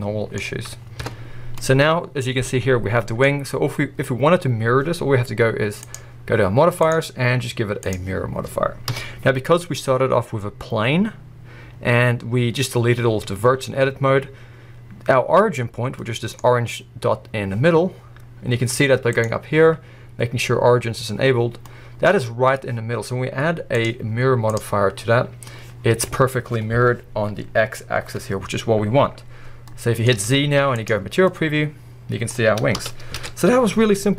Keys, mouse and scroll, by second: 1.1 Tab, 1.3-1.7 scroll down 1, 1.7-7.9 middle drag, 3.2-4.8 scroll up 1, 4.8-5.9 scroll up 1, 5.9-7.9 scroll up 1, 7.9-12.6 drag, 8.9 KP_1, 9.8-11.3 scroll up 1, 11.3-12.5 scroll up 1, 12.5 scroll down 1, 14.0 scroll up 1, 14.9-16.0 drag, 16.0-16.4 middle drag, 16.4-21.7 drag, 16.4 scroll up 1, 21.5 scroll down 1, 21.7-25.8 middle drag, 22.1-22.8 scroll up 1, 22.8-25.6 scroll up 1, 25.6 scroll up 1, 25.8-29.7 drag, 25.8-27.0 scroll down 1, 27.0-28.0 scroll down 1, 29.7 middle click, 30.1 z, 31.1 scroll down 1, 31.2-32.3 middle drag, 32.8 KP_1, 33.2 alt+a.